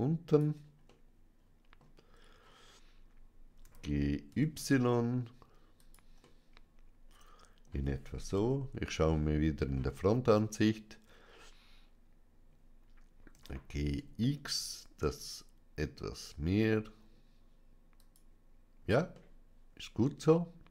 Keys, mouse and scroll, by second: 0.1 click, 0.7-2.1 middle drag, 2.1-3.5 scroll down 2, 3.5 g, 4.1 y, 5.6 click, 6.1-8.2 middle drag, 8.2 KP_1, 9.5-10.1 scroll up 2, 13.2 g, 13.9 x, 17.8-19.0 drag, 19.3-20.7 middle drag.